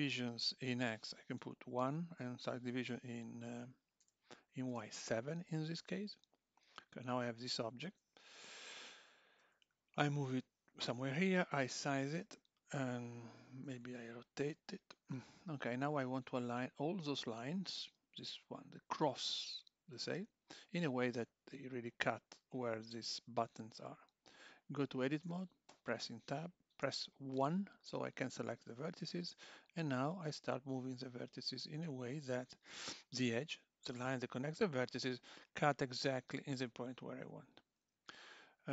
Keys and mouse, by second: 0.4 click, 6.9 click, 9.4 g, 11.0 s, 13.7 r, 23.6 click, 25.2 Tab, 26.8 1, 28.0 click, 29.0 g, 32.1 click, 32.2 g, 35.3 click, 35.6 g.